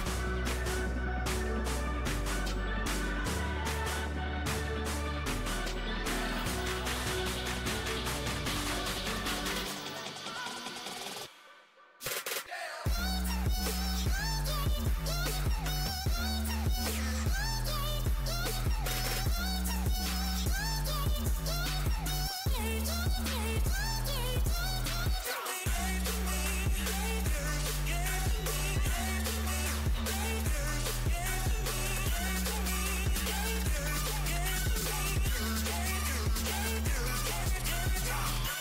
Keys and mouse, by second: 1.3 ctrl+e, 4.4 ctrl+r, 6.0 click, 6.6-7.8 middle drag, 7.6 Tab, 8.2 z, 8.9 Tab, 9.7-11.0 typing, 12.5 click, 15.2 ctrl+r, 24.1 Tab, 29.6 Tab, 31.2 ctrl+r, 35.1 ctrl+r.